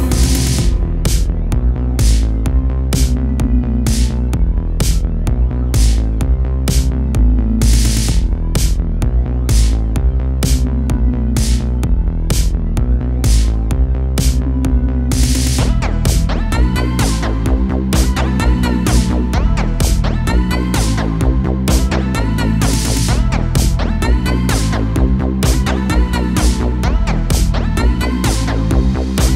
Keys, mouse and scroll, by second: 0.3-0.7 scroll down 1, 0.7-2.4 shift+middle drag, 2.4-2.9 scroll up 2, 2.9 middle click, 3.5 KP_7, 4.0 shift+middle click, 4.4-5.2 scroll up 2, 5.2-6.0 scroll up 2, 6.0 l, 6.6 r, 7.1 g, 8.0 r, 9.7 middle click, 10.6-10.9 scroll up 1, 10.9-13.6 typing, 12.8-13.1 scroll down 1, 13.1 middle click, 14.8-17.9 shift+middle drag, 18.1 l, 18.7 KP_7, 19.3-19.7 scroll down 1, 19.7 shift+middle click, 20.1-20.5 scroll up 1, 20.5 shift+d, 21.0 g, 22.0-22.4 scroll up 2, 22.4 r, 23.6 r, 24.8 middle click, 25.6 scroll up 1, 25.9 r, 26.8 g, 28.0 middle click, 28.9 g.